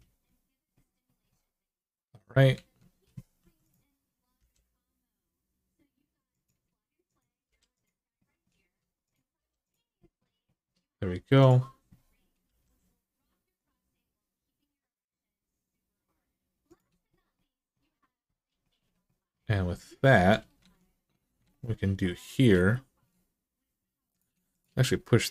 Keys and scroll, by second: 2.3 alt+z, 3.2-4.2 typing, 7.2 g, 9.1 g, 12.2 g, 20.4 alt+z, 21.2 alt+z.